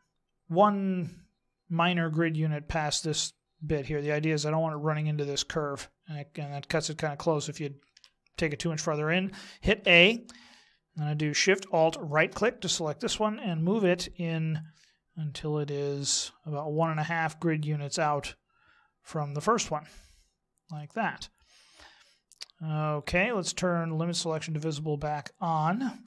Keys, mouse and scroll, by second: 4.0 middle click, 7.9 KP_1, 9.8 a, 11.9 alt+shift+right click, 13.5 click, 24.6 click.